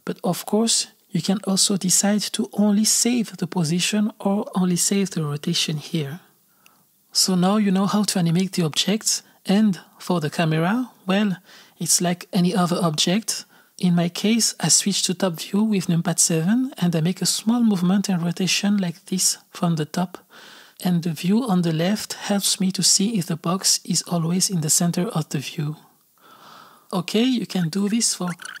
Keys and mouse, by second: 2.4-5.4 drag, 8.0 x, 8.6-10.1 drag, 13.4 click, 15.2 click, 15.6 click, 16.3 KP_7, 17.0 shift+d, 17.8 g, 18.4 r, 19.8 i, 21.1 i, 22.0 click, 22.2 space, 23.2 space, 23.9 space, 24.3 click, 26.1-27.5 drag, 27.5 s, 27.8 click, 28.4 alt+a.